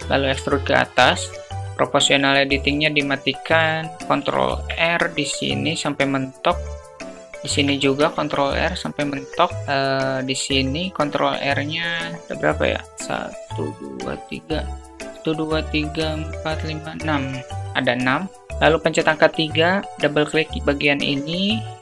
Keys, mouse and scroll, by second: 1.3 ctrl+z, 2.4 click, 3.9 ctrl+r, 7.2 ctrl+r, 9.9 ctrl+r, 10.1 ctrl+r, 18.5 3, 19.7 click, 21.1 click, 21.3 click.